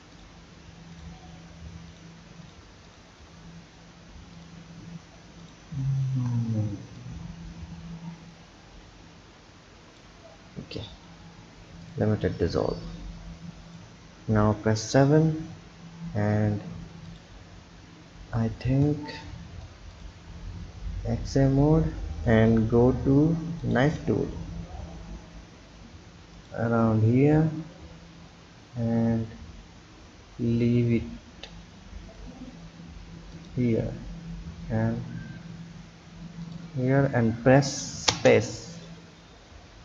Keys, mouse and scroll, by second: 0.1 shift+click, 0.9 shift+click, 1.9 shift+click, 2.4 shift+click, 2.8 shift+click, 4.3 shift+click, 5.4 shift+click, 7.0 click, 11.0 Delete, 12.9 click, 14.4 KP_7, 16.4-17.0 scroll up 1, 17.0-20.0 drag, 23.6-29.4 drag, 39.1-39.8 scroll up 2.